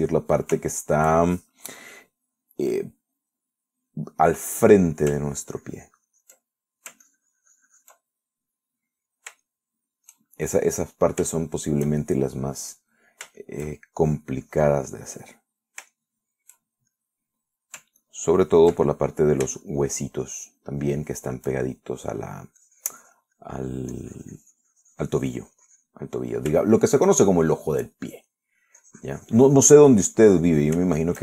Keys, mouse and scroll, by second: 0.4 ctrl+click, 1.2 ctrl+middle click, 2.0 shift+middle click, 4.0-5.3 middle drag, 5.8 middle click, 6.4-7.7 ctrl+drag, 7.7 ctrl+middle click, 8.3-9.3 ctrl+drag, 9.4 ctrl+middle click, 10.7 shift+middle click, 12.1 shift+middle click, 12.6 shift+middle click, 13.3 shift+middle click, 14.1 middle click, 15.3 shift+click, 15.7 click, 16.1 click, 16.4 middle click, 17.2 shift+middle click, 18.2 shift+middle click, 19.5 ctrl+click, 20.2 ctrl+middle click, 20.9 shift+middle click, 21.6 shift+middle click, 22.2 shift+middle click, 22.9 shift+middle click, 23.8 click, 24.6 middle click, 25.5-27.3 drag, 27.3 middle click, 28.4 shift+middle click, 29.2 shift+middle click, 30.0-31.2 drag.